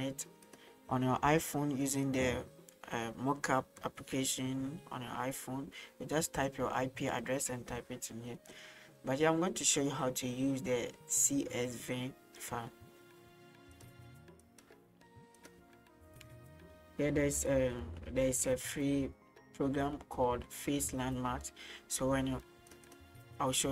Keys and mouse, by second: 0.5-2.1 drag, 6.3 click, 8.4 middle click, 8.9 middle drag, 13.8-14.6 drag.